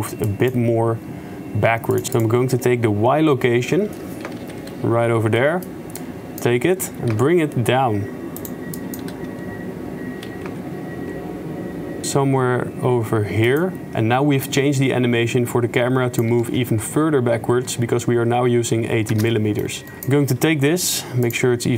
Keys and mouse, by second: 2.2 click, 4.3 a, 4.4 KP_Decimal, 5.6 middle click, 6.0-6.4 drag, 7.0 g, 8.8 drag, 9.0 g, 14.5-16.3 drag, 16.5 shift+space, 19.2 shift+space, 19.4 click, 20.0 click, 20.4 g.